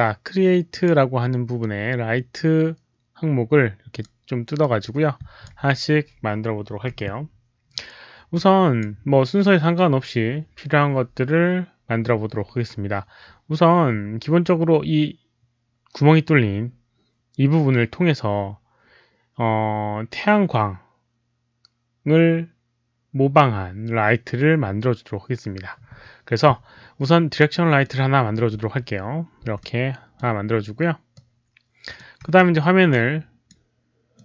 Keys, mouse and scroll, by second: 0.7 click, 3.8 click, 4.5 click, 8.3 click, 27.8 click, 29.4 w, 29.6-31.1 middle drag, 31.1 click, 32.1 e, 32.9 click, 34.1-34.2 drag.